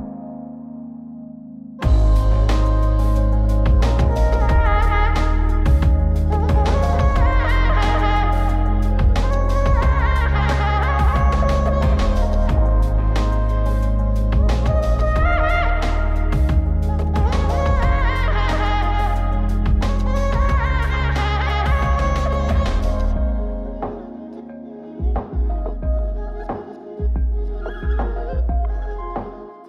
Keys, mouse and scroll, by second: 1.9-3.6 drag, 3.8-4.7 scroll up 4, 4.7 middle click, 5.9 click, 6.9 middle click, 7.9 click, 8.5 m, 9.1 m, 10.2 m, 11.0 m, 11.9 m, 13.0 m, 15.1 alt+s, 20.2-20.6 middle drag, 23.4 click, 24.9 ctrl+click, 25.7 ctrl+drag, 26.5 ctrl+drag, 27.4 ctrl+click, 28.3 ctrl+click, 29.1 ctrl+click.